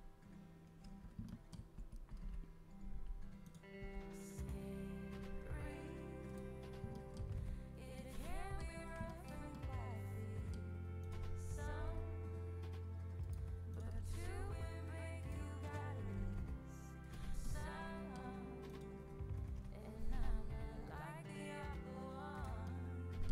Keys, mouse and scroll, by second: 1.2 middle click, 1.7 z, 2.6 g, 3.7 g, 6.5 middle click, 6.9-10.7 middle drag, 7.2 z, 10.9-12.7 right drag, 11.6 g, 13.7-15.4 right drag, 13.8 g, 15.6-17.4 right drag, 16.0 g, 18.3-19.5 middle drag, 19.5 KP_7, 20.8 g.